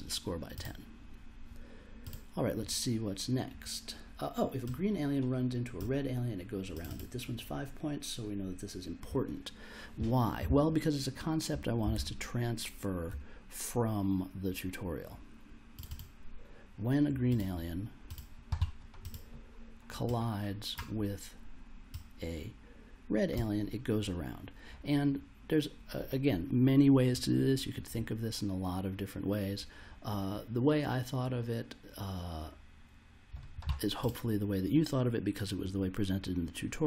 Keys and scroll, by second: 11.9 super+Tab.